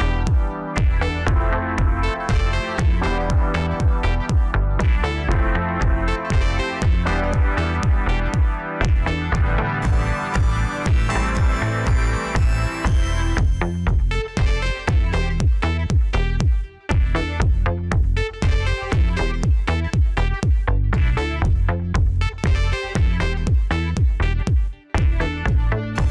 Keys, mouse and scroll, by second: 0.3-1.5 scroll down 2, 1.7 shift+d, 7.6 click, 8.9 shift+d, 14.0-14.5 scroll down 1, 14.5 click, 15.4-15.8 ctrl+KP_2, 16.5-17.5 scroll up 3, 17.5 Tab, 18.1 click, 18.7-20.1 scroll up 1, 20.1 shift+d, 21.9 p, 23.6 Tab, 24.3-25.0 scroll down 4, 25.0 click, 26.0 Tab.